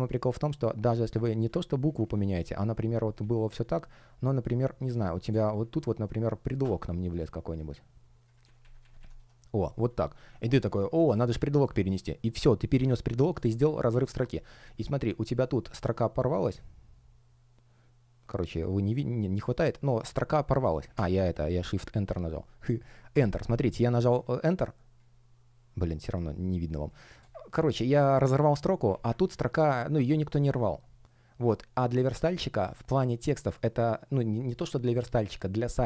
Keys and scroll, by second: 4.9 space, 11.4 shift+Return, 19.9 super+я, 22.0 BackSpace, 23.0 Return, 26.6 space, 27.5 super+я.